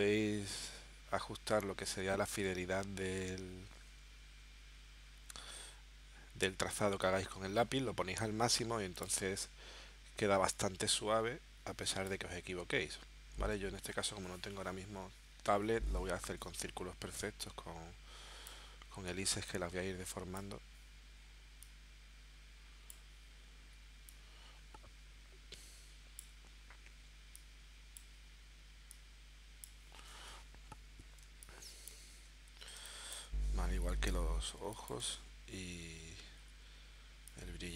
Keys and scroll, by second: 13.3 super+z, 15.6 v, 31.2 space, 32.8 space, 34.0 l, 34.6 space.